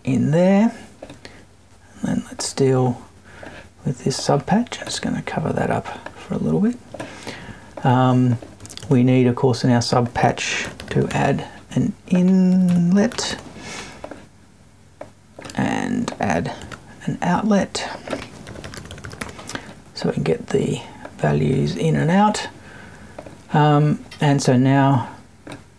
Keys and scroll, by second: 12.5 BackSpace.